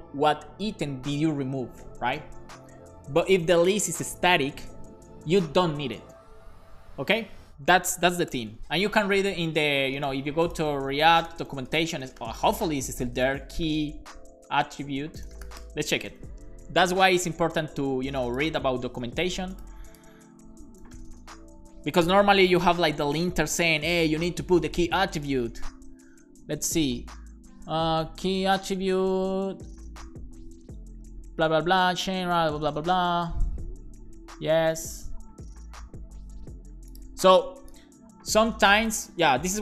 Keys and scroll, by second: 8.3 alt+shift+f, 8.6 super+s.